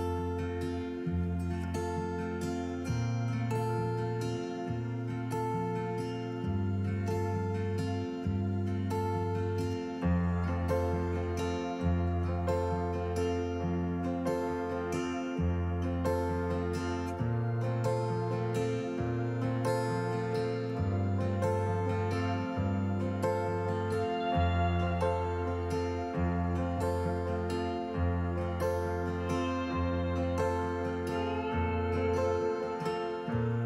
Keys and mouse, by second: 1.7 middle click, 4.4 Tab, 5.5 click, 6.5 s, 6.9 x, 10.8 click, 13.3 click, 14.8 Tab, 15.2 click, 16.6-23.2 alt+s, 24.7 Tab, 26.3 KP_1, 30.1-31.2 drag.